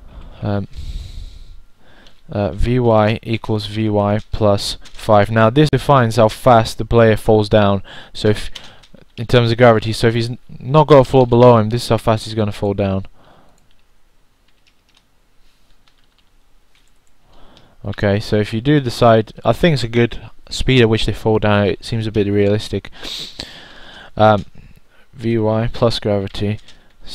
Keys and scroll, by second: 2.3-8.4 typing, 19.0 0, 19.9 1, 23.0 1.